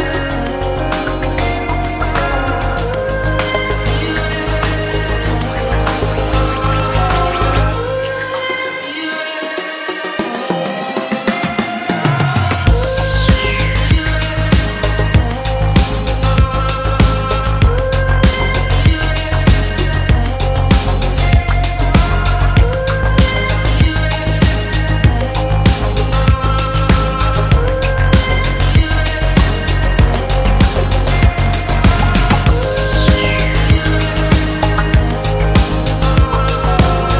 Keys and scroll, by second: 20.9 g, 21.7 shift+g, 22.9 x.